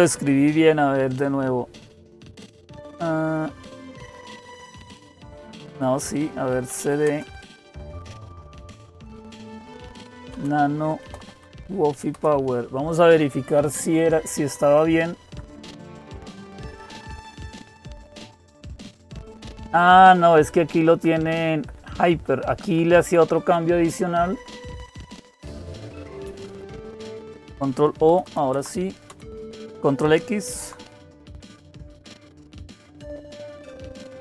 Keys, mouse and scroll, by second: 6.3-7.2 typing, 8.3-11.6 typing, 11.9 Return, 12.9 Down, 13.6 Down, 13.7-15.1 Down, 15.7 Down, 15.7 Up, 16.4 Up, 16.4 Up, 19.6-20.8 Right, 21.3 Right, 21.7 Right, 21.9 Right, 22.1 Right, 22.3 Right, 22.5 Right, 22.7 Right, 24.1 Delete, 24.4 Delete, 24.9 Delete, 24.9 Delete, 25.5 Delete, 26.3 Right, 26.5 Right, 26.7 Right, 28.2 ctrl+o, 28.9 Return, 30.1 ctrl+x.